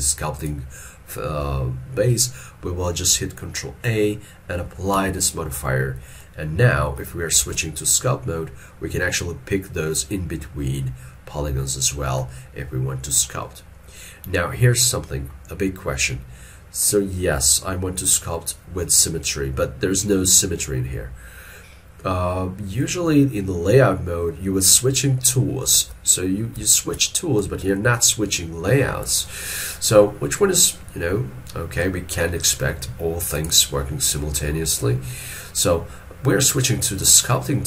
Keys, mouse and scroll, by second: 5.0 ctrl+a, 6.2 middle click, 7.5 ctrl+Tab, 12.3 middle click, 25.8 ctrl+Tab, 26.7 ctrl+Tab, 27.5 ctrl+Tab.